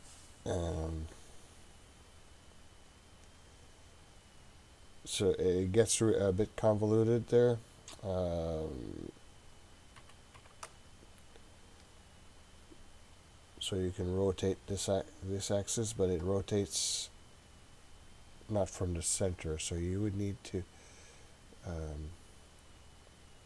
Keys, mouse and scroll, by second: 3.8-12.3 drag, 13.1-19.8 drag.